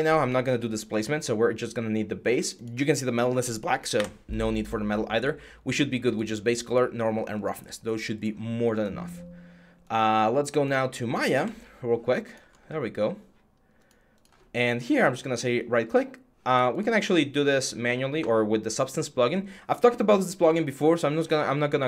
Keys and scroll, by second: 3.7 Delete, 11.2 Tab, 12.1 Tab.